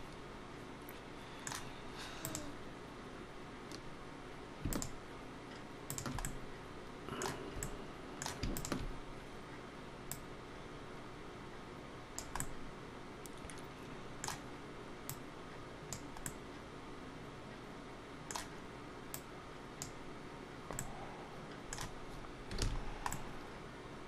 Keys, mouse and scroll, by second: 2.1 click, 4.5 shift+click, 5.7 shift+click, 6.1 middle click, 7.4 middle click, 8.3 shift+click, 9.9 click, 12.2 middle click, 14.9 click, 16.1 middle click, 18.9 click, 20.6 middle click, 22.4 alt+a, 22.6 scroll down 2, 22.9 middle click.